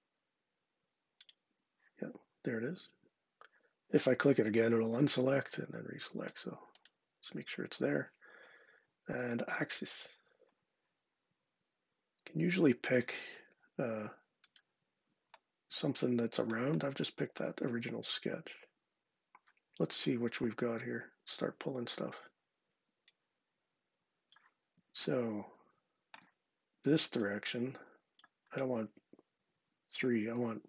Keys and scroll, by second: 30.1 Tab, 30.5 typing.